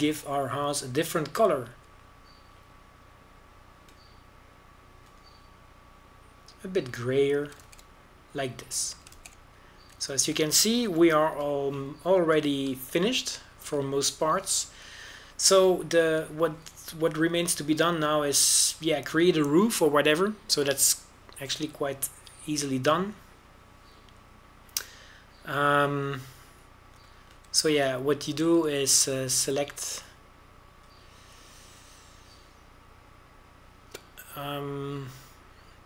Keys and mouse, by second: 0.6 shift+z, 3.7 z, 9.6 shift+z, 11.1 shift+z, 12.9 KP_Decimal, 13.3 KP_5, 17.5 Tab, 20.1 middle click, 24.5-26.8 middle drag, 29.1 click, 29.6 middle click, 30.7-32.9 right drag, 33.4 a.